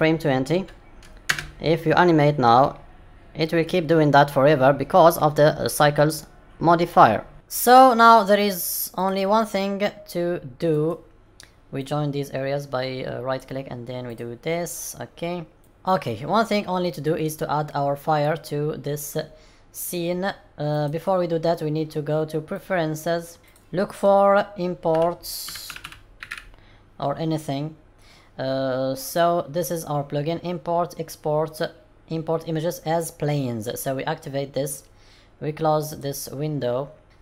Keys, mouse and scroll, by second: 1.3 space, 8.9 click, 10.6 right click, 15.6 n, 16.0 middle click, 17.7-18.5 scroll down 1, 20.6 click.